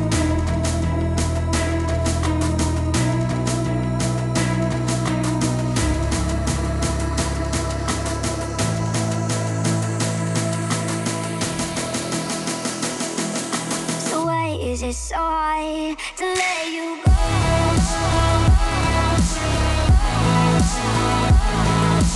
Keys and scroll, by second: 0.7 u, 2.9 u, 4.2 F9, 6.4 F9.